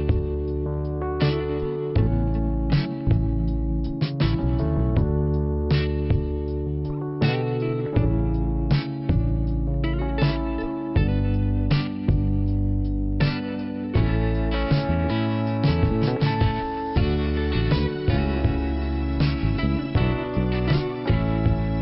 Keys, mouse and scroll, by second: 0.4 click, 1.0 click, 6.2 click, 7.8 click, 9.6 click, 10.4-10.8 scroll down 1, 13.5 click, 15.3 click, 15.9 click, 16.9 click, 18.1 click, 18.8 click, 18.8 click, 19.2 scroll down 2, 21.1 scroll up 2.